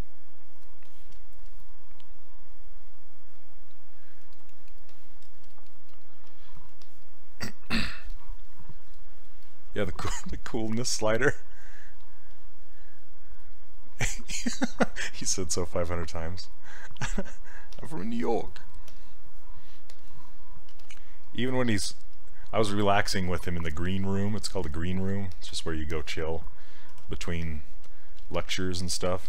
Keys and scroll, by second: 20.8 s, 27.0 ctrl+w.